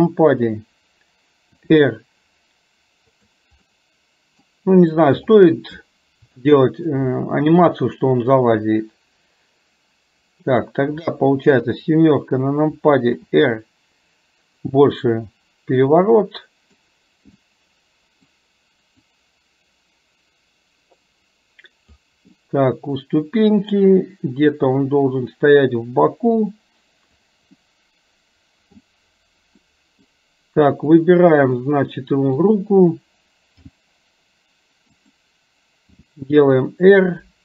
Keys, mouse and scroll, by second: 3.6 middle click, 6.5 shift+middle click, 7.5-10.6 middle drag, 15.1-16.8 middle drag, 17.5-18.3 middle drag, 19.0-22.1 drag, 22.4-23.9 middle drag, 24.9-27.4 drag, 27.6-28.9 middle drag, 29.6-30.2 middle drag, 31.0 click, 31.6-32.5 middle drag.